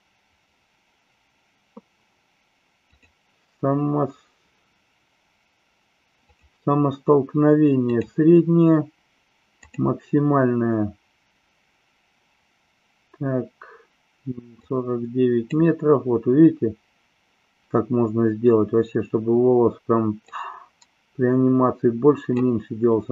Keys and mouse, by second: 6.3 click, 7.9-9.7 drag, 14.5-15.5 drag, 20.3-22.3 drag.